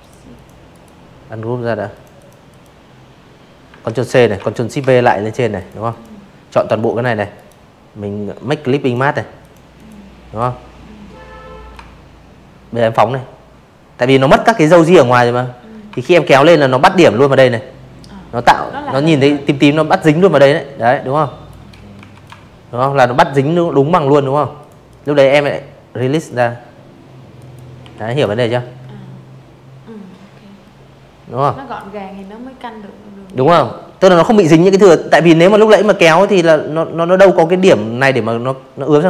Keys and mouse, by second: 0.8 ctrl+c, 1.7 ctrl+shift+v, 2.5 click, 2.8 click, 3.5 click, 4.3 right click, 5.8 click, 6.4 click, 6.7 click, 8.7-11.0 shift+drag, 13.3-18.4 shift+drag, 18.9 v, 19.2-19.8 shift+drag, 21.5 click, 21.8 click, 22.2 right click, 22.9 click, 23.2 click, 24.3 click, 24.7 Delete, 25.0 click, 28.4 click, 32.4 space, 32.5 click, 32.8 v, 36.4 click, 37.8 ctrl+z, 38.6 ctrl+z.